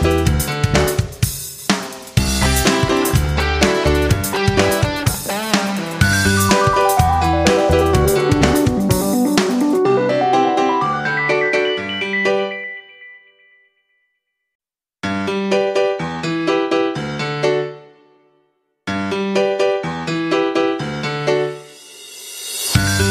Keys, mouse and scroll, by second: 0.0 right click, 1.2-8.2 drag, 10.7 F9, 12.1-17.9 drag.